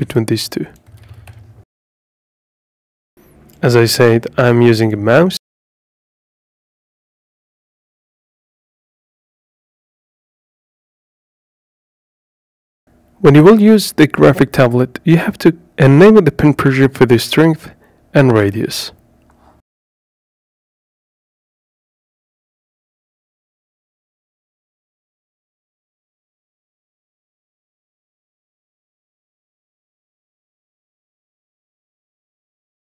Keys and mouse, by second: 1.0-3.3 drag, 6.4-9.2 drag, 10.8 click, 17.4-18.5 drag, 31.3 ctrl+z.